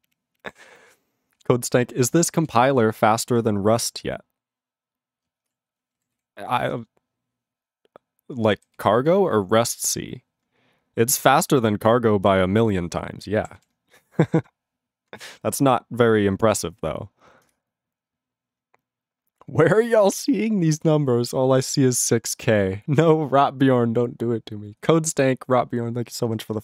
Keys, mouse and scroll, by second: 1.4 ctrl+s, 5.6 ctrl+s, 6.2 ctrl+s, 8.8 ctrl+s, 13.6 ctrl+s.